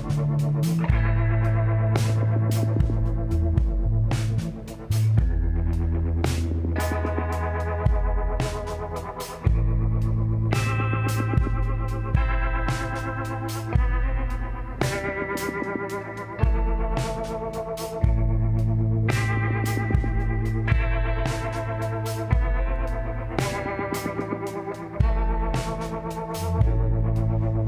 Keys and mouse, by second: 1.2-4.7 drag, 3.3-5.1 middle drag, 8.6-11.4 middle drag, 13.5-15.3 drag, 14.1-15.9 middle drag, 16.1 KP_1, 17.7-22.3 drag, 23.0 Tab, 24.7-26.5 drag, 26.4 ctrl+z.